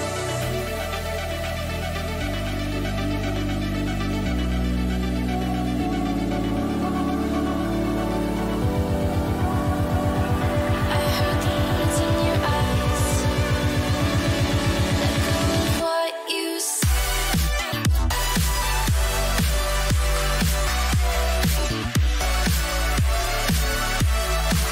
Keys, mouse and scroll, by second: 4.6 F6, 9.3 KP_1, 10.5 r, 14.1-15.8 middle drag, 15.8 KP_3, 17.0 g, 18.2 z, 18.6-20.5 middle drag, 19.3 s, 20.8-24.7 middle drag.